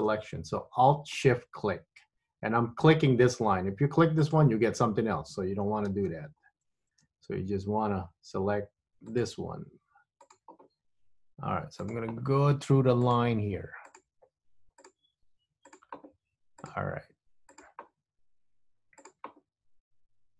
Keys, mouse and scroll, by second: 1.2 alt+shift+click, 4.3 alt+shift+click, 6.0 super+z, 9.2 alt+shift+click, 10.3 alt+shift+click, 12.0 alt+shift+click, 13.1 alt+shift+click, 14.0 alt+shift+click, 15.0 alt+shift+click, 15.8 alt+shift+click, 16.7 alt+shift+click, 17.7 alt+shift+click, 19.1 alt+shift+click.